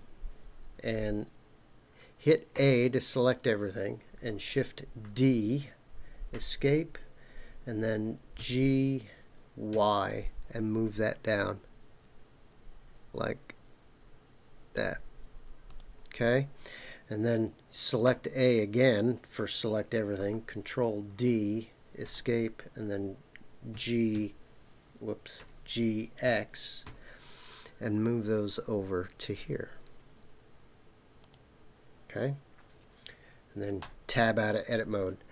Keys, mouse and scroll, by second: 2.5 a, 5.0 shift+d, 6.3 Escape, 8.4 g, 9.7 y, 15.7 click, 18.0 a, 21.1 shift+d, 22.0 Escape, 23.7 g, 24.1 y, 25.4 Escape, 26.2 g, 26.9 x, 31.2 click, 33.8 Tab.